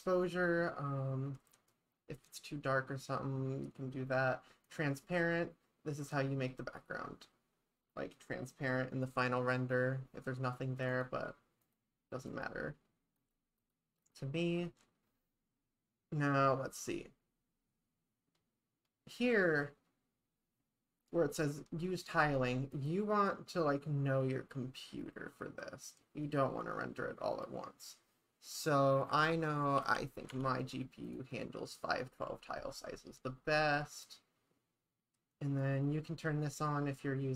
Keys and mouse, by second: 4.7 click, 10.9 click, 11.6 click, 12.3 click, 13.2 click, 13.6 click, 14.1 click, 22.7-31.2 drag.